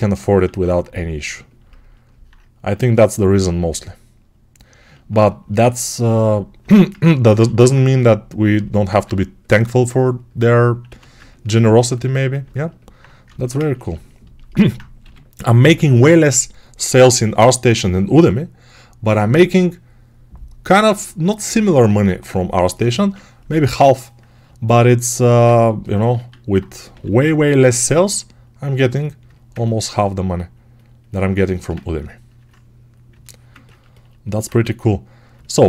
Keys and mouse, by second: 0.4 alt+q, 5.0-7.0 alt+shift+drag, 7.0-11.0 alt+right drag, 7.3 1, 8.8 2, 10.7 1, 14.9 g, 26.0 alt+q, 26.4-35.2 right drag, 26.8 g, 34.3 1, 35.2-35.6 alt+drag.